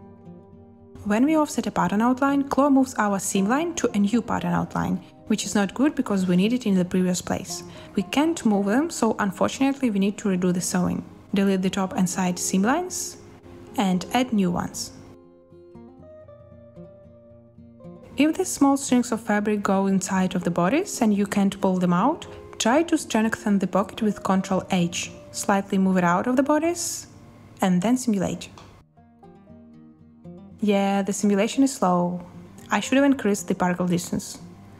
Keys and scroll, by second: 4.5 b, 10.0 BackSpace, 11.7 BackSpace, 12.7 n, 16.2 a, 17.3 space, 19.9 space, 21.9 a, 23.9 ctrl+h, 26.3 space, 30.5 space, 32.7 space.